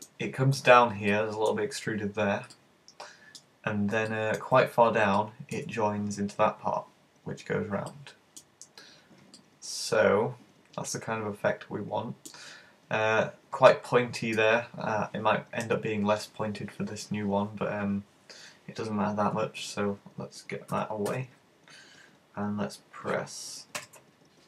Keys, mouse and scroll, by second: 1.1 middle click, 2.5 middle click, 3.5-4.1 scroll up 2, 4.1 shift+middle click, 5.2 middle click, 7.9 middle click, 8.8-9.4 scroll down 4, 9.4 middle click, 9.4-9.7 scroll down 1, 13.8 middle click, 19.6 z, 20.7 z, 23.8 alt+h.